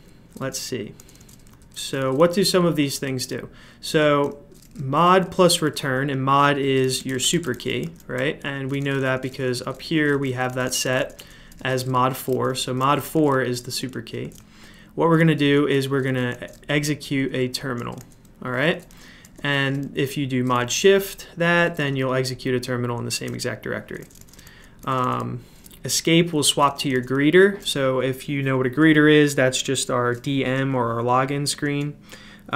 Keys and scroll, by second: 0.0-26.9 typing, 31.6 j.